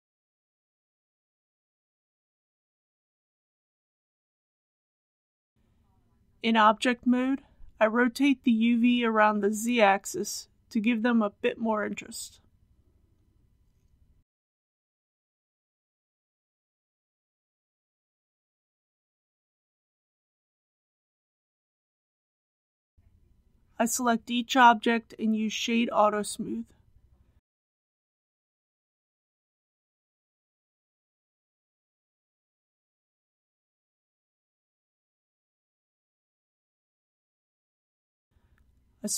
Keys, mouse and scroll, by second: 2.3 click, 5.2 Tab, 6.2 KP_1, 8.5 r, 9.1 z, 10.4 KP_1, 10.7 KP_5, 12.3 click, 13.4 shift+middle click, 14.4 shift+a, 15.2 shift+g, 15.4 shift+z, 17.9 shift+click, 18.5 click, 19.0-19.3 scroll down 1, 20.0 shift+middle click, 24.5 click, 25.5 right click, 27.4 click, 28.0 right click, 28.2 click, 28.9 right click, 29.1 click, 29.7 right click, 30.2 click, 32.1-33.4 middle drag, 33.9 click, 34.4 right click, 34.9 click, 36.7 middle click, 38.3 KP_1.